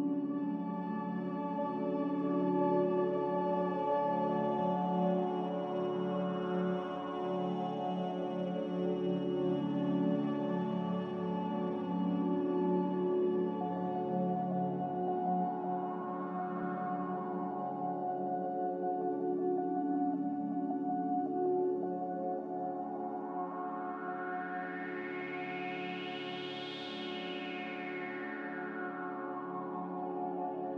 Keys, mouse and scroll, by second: 1.0 ctrl+s, 7.0 click, 11.3 z, 13.0 Return, 23.6 b, 29.9-30.7 typing.